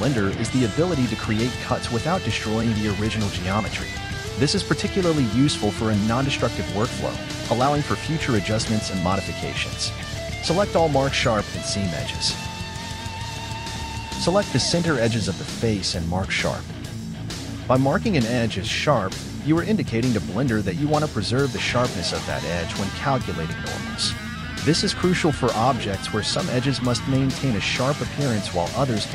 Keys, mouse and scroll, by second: 0.0 shift+right click, 0.5 shift+right click, 1.0 shift+right click, 1.4 shift+right click, 1.9 shift+right click, 2.4 shift+right click, 3.1 shift+right click, 5.2 ctrl+e, 10.9-11.3 scroll down 3, 11.3 alt+right click, 11.5 z, 11.8 middle click, 12.6 click, 12.9 z, 13.0-13.7 scroll up 4, 13.1 middle click, 13.7 alt+shift+right click, 13.8 scroll down 5, 13.9 middle click, 14.2-16.4 typing, 14.4 middle click, 14.6 scroll up 1, 15.1 alt+shift+right click, 15.2 scroll down 3, 15.4 shift+middle click, 15.7 scroll up 1, 15.9 alt+right click, 16.0-16.6 scroll down 2, 16.2 middle click, 16.6 middle click, 16.9 ctrl+z, 17.0 scroll up 2, 17.2 alt+shift+right click, 17.4 scroll down 1, 17.4 middle click, 18.6 KP_3, 18.9 ctrl+click, 19.3 scroll up 5, 19.5 ctrl+click, 20.0 ctrl+click, 20.2 scroll down 4, 20.4 shift+middle click, 20.7 ctrl+click, 21.1-21.7 scroll up 6, 21.2 shift+middle click, 21.7 middle click, 22.0 scroll down 2, 22.1 shift+middle click, 22.6 ctrl+click, 23.2 ctrl+click, 23.4 middle click, 23.6 scroll up 3, 23.7 middle click, 23.9 ctrl+click, 24.2 middle click, 24.9 scroll down 4, 25.0 middle click, 25.5 z, 25.9 ctrl+e, 26.4 middle click, 26.5 KP_1, 26.7-27.7 shift+middle drag, 27.7 KP_1, 27.9 shift+middle click, 29.0 a.